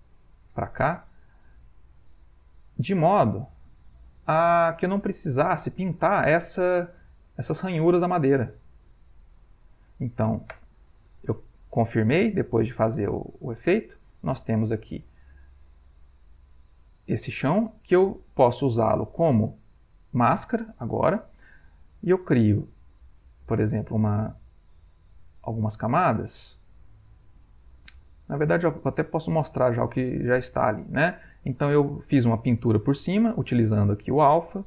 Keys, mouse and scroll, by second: 0.3-1.6 drag, 2.7-4.7 drag, 5.2 click, 6.1-7.3 ctrl+middle drag, 7.6 ctrl+middle click, 8.6-10.0 drag, 10.6 Return, 14.1 middle click, 14.6-15.0 scroll up 1, 15.1-16.2 ctrl+middle drag, 16.2 ctrl+middle click, 22.5 click, 24.7-28.4 drag, 31.4 click.